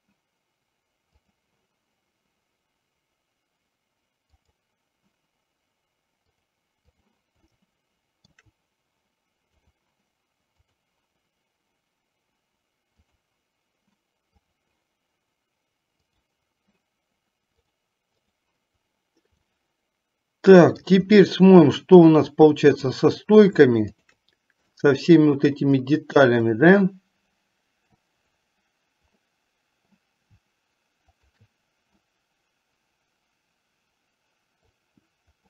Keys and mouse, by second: 1.3 click, 6.5-7.3 drag, 7.8-8.6 shift+middle drag, 9.7 click, 10.8-13.6 drag, 14.5 click, 17.7-18.7 drag, 19.7-21.1 middle drag, 24.0 shift+click, 25.0-25.6 shift+middle drag, 26.8-28.3 middle drag, 29.4-30.1 middle drag, 31.3 shift+click, 32.3-34.9 middle drag.